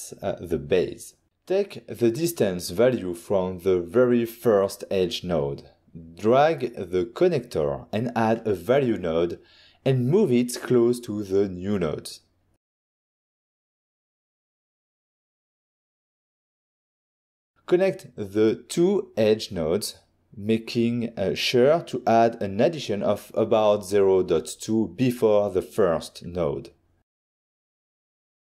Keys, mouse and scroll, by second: 2.4 middle click, 2.9 middle click, 4.4-4.7 scroll down 1, 4.8 ctrl+scroll down 1, 4.9 ctrl+scroll up 1, 5.5 click, 6.4 click, 7.6-8.3 typing, 9.2 Return, 12.1 click, 12.8 middle click, 13.4 middle click, 13.5 scroll down 1, 14.2 click, 16.1 click, 16.2 shift+right click, 16.4 g, 16.9 middle click, 16.9 middle click, 17.4 click, 17.5 middle click, 17.9 middle click, 17.9 scroll up 1, 18.2 middle click, 18.4 middle click, 18.8 click, 20.7 click, 22.3 click, 22.7 click, 23.3-23.7 typing, 25.5 Return, 27.2 click, 28.4 click.